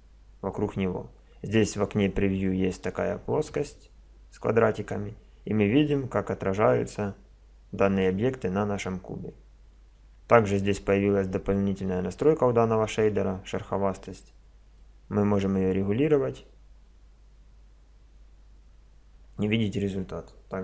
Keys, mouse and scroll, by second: 14.8-16.7 drag.